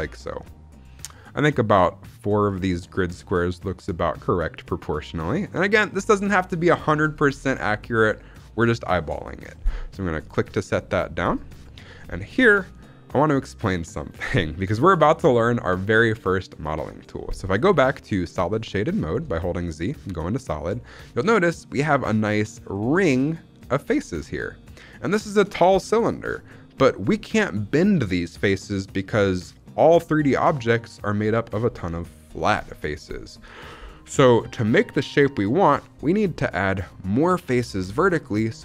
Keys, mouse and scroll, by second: 10.1 click, 13.4-14.9 middle drag, 17.6 z, 19.3 shift+middle click, 20.3-21.9 middle drag, 22.6-25.2 middle drag, 26.2 middle click.